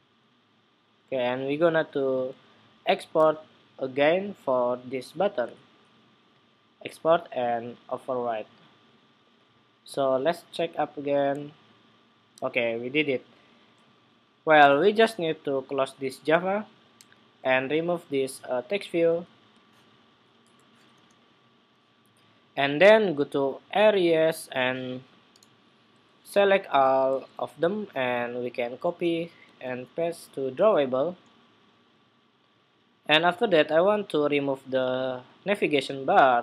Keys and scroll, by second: 26.5 super+a, 26.8 super+c, 29.3 super+v.